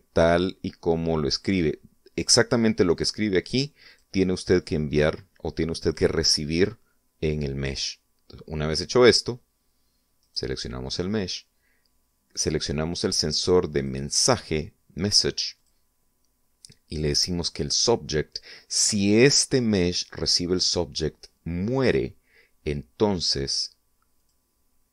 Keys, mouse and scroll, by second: 4.2 click, 5.1 click, 11.4 right click, 15.0 click, 16.8 click.